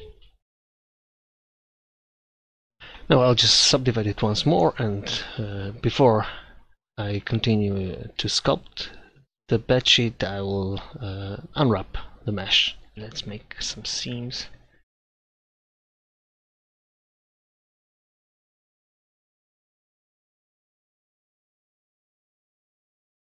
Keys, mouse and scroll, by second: 2.7-3.8 middle drag, 4.2 Tab, 8.6 Tab, 9.7 a, 10.9 u, 18.8 ctrl+z, 19.7 click, 20.4 ctrl+x, 20.7 ctrl+z, 21.2 ctrl+z, 22.2 shift+e.